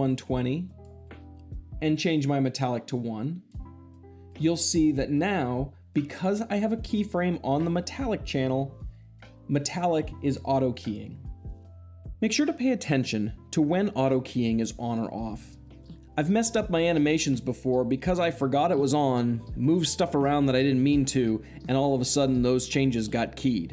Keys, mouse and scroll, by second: 2.7-3.8 drag.